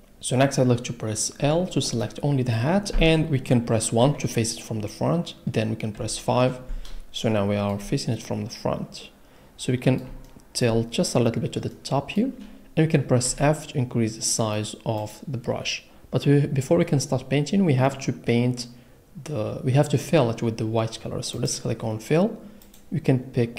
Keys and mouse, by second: 1.4 l, 4.0 KP_1, 5.9 KP_5, 13.2 f, 15.0 click, 21.3 click, 22.7 click.